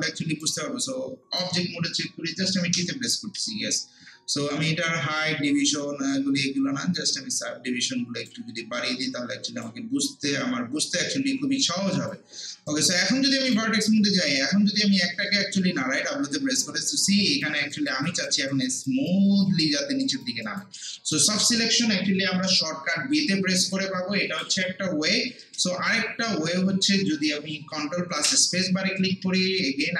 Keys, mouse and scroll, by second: 0.4-2.7 right drag, 2.7 t, 7.0-12.7 drag, 12.7-14.3 right drag, 14.3 click, 14.7 scroll up 1, 15.1 alt+middle click, 15.9 w, 16.6 click, 17.7 alt+right click, 18.1 alt+click, 18.5 alt+right click, 19.3 alt+click, 19.6 alt+right click, 20.0 alt+click, 20.4 alt+right click, 20.8 alt+middle click, 21.1 alt+right click, 21.5 alt+middle click, 23.7 click, 24.9 ctrl+z, 28.2 ctrl+space, 29.5 scroll down 1, 29.8 alt+click.